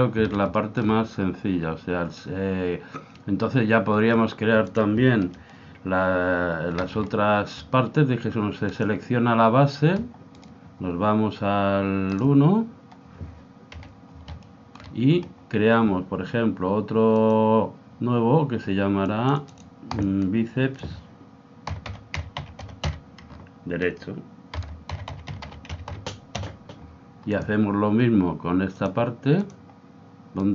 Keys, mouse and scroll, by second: 0.8-2.4 middle drag, 4.2 middle click, 4.9 click, 5.5 Escape, 7.0-8.9 middle drag, 8.9 click, 10.4-12.2 right drag, 12.2 click, 13.7 KP_7, 14.4-16.9 middle drag, 17.2 click, 19.3 click, 28.8 click, 30.4-30.5 right drag.